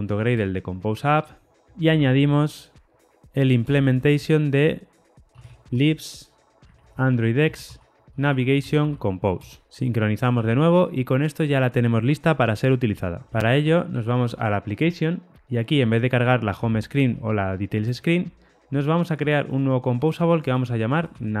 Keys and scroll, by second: 3.6 Return, 7.3 Return, 9.7 shift+super+o.